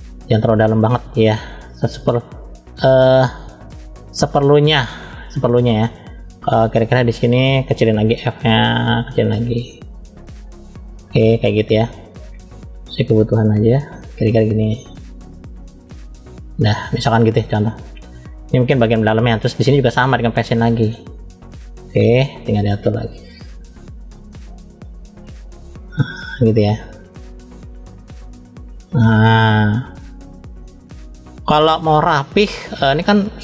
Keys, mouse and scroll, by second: 1.0 scroll down 1, 1.8 click, 4.3-4.9 drag, 9.0 click, 11.6 middle click, 12.6 click, 17.0 click, 17.9 middle click, 19.1-19.6 scroll down 2, 19.5 middle click, 21.5 f, 22.9 click, 29.1 middle click, 30.0 click, 31.8 click, 32.5 middle click, 33.2-33.4 scroll up 1.